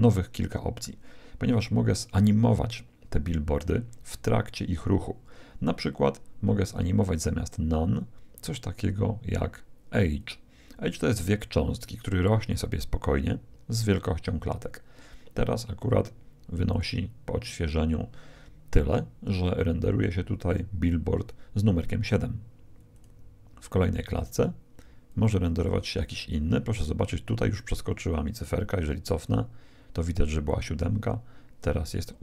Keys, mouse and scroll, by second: 6.6-8.3 drag, 16.7-18.3 drag, 22.9-26.7 drag, 29.2-30.9 drag, 31.9-32.2 drag.